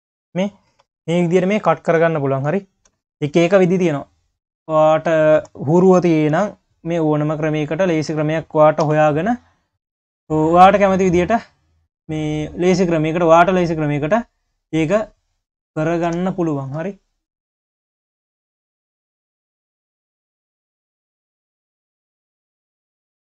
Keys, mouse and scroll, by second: 0.4 q, 0.9-1.5 scroll down 7, 1.5 q, 2.0-2.9 scroll up 6, 2.9 KP_3, 3.3-4.7 scroll up 5, 4.7 click, 5.3 Tab, 6.3 Tab, 7.0 click, 7.4 click, 7.9 Tab, 8.9 1, 9.3 click, 9.8-10.5 scroll up 2, 10.5 click, 11.5 click, 12.9-13.6 scroll down 2, 13.8 click, 14.4 click, 15.2 click, 16.1 Tab, 17.0 click, 17.3 scroll down 3, 17.6 q, 18.5 click, 18.9 scroll down 1, 19.2 q, 19.8 click, 20.5 click, 21.3 q, 21.8 click.